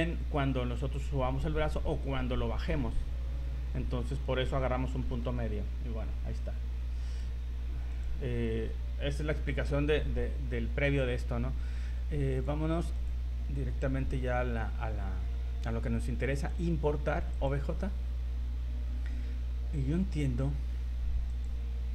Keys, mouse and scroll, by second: 5.0 scroll down 4, 5.4 scroll up 1.